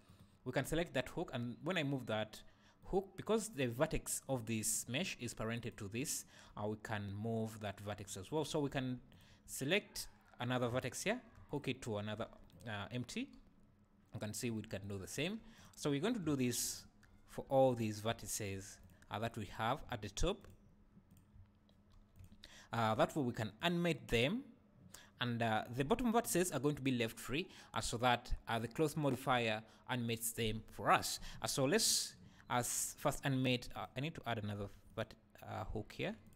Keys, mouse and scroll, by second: 0.2 right click, 1.2 g, 2.9 right click, 4.3 click, 5.6 click, 6.0 click, 6.5 g, 8.1 right click, 8.4 click, 8.7 Tab, 9.1 click, 11.1 ctrl+h, 12.2 Tab, 12.5 click, 13.3 g, 14.5 right click, 14.8 click, 15.2 Tab, 15.5 click, 16.4 ctrl+h, 17.1 Tab, 17.6 Tab, 17.7 click, 18.5 ctrl+h, 19.5 click, 20.3 ctrl+h, 21.1 click, 21.9 ctrl+h, 22.7 Tab, 23.6 click, 33.7 click, 34.3 Tab, 34.8 Tab, 34.9 click, 36.2 shift+click.